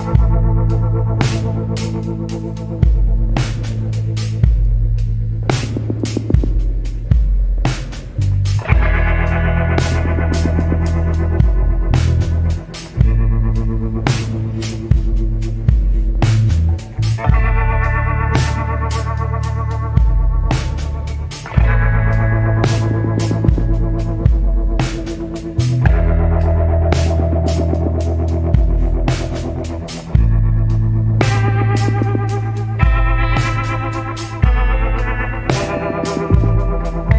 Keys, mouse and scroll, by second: 4.7 scroll down 1, 7.7 scroll up 1, 9.3 scroll down 1, 10.2 scroll up 1, 17.5 scroll down 1, 19.3 scroll up 1, 31.4 scroll down 1, 32.6 scroll up 1.